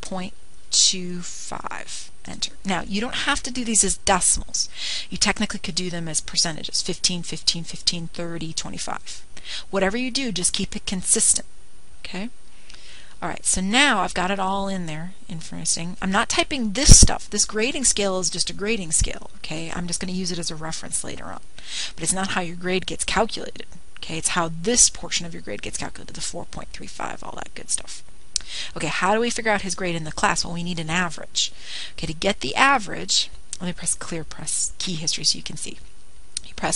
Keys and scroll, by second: 1.4 ., 2.6 2, 3.3 5, 3.8 Return, 10.4-11.2 typing, 16.4 ^, 16.8 Up, 17.1 ^, 24.9 Up, 32.8 ^, 35.2 Up.